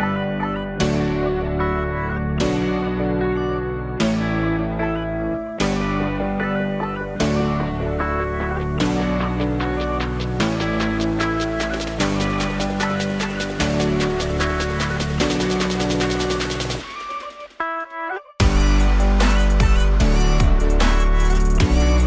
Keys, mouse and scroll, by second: 1.3-1.7 scroll, 4.2 alt+click, 6.6 Tab, 6.8-7.3 alt+drag, 7.3-7.7 scroll down 2, 7.7-9.3 alt+drag, 9.3-11.3 alt+middle drag, 11.3-12.2 scroll up 2, 12.2-13.7 alt+middle drag, 13.7-16.5 drag, 16.5-17.8 scroll up 1, 17.8-22.0 drag.